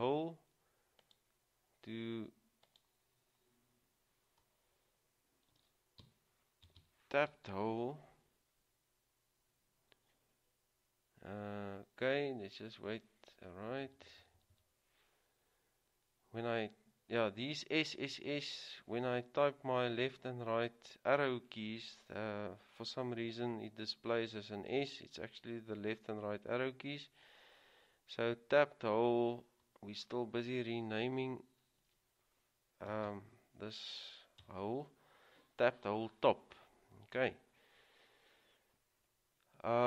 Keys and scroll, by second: 5.6-6.2 typing, 7.3-8.1 typing, 13.8-14.7 typing, 31.8 typing, 33.1 typing, 34.6 Return, 34.6 typing.